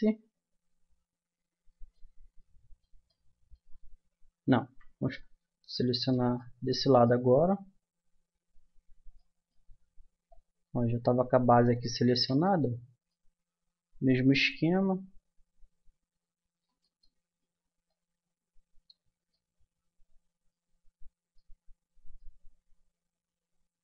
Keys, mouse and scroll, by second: 2.4 middle click, 3.3 middle click, 3.7 Tab, 4.6 a, 5.4 Tab, 8.4 Tab, 10.3-12.0 drag, 12.4-14.1 middle drag, 14.1-15.8 drag, 16.8-19.8 middle drag, 19.9-21.3 middle drag, 21.6-23.8 middle drag.